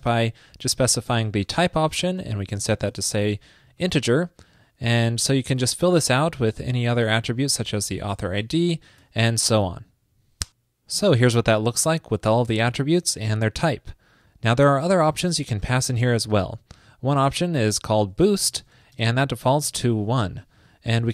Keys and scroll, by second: 3.9 super+Right, 5.3 ctrl+shift+d, 5.8 alt+Left, 5.8 alt+Left, 6.3 alt+Left, 9.2 super+Right.